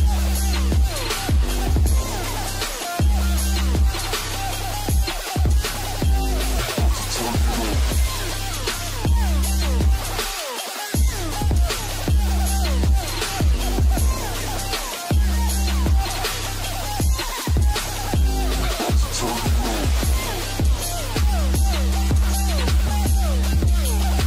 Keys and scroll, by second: 1.3 Delete, 4.0 ctrl+space, 5.5 |, 6.0 ctrl+space, 7.2 space, 8.4 ctrl+alt+space, 10.4 ctrl+alt+space, 12.6 ctrl+alt+space, 15.0 ctrl+space, 17.3 space, 19.0 |, 19.6 ctrl+space, 23.5 ctrl+space.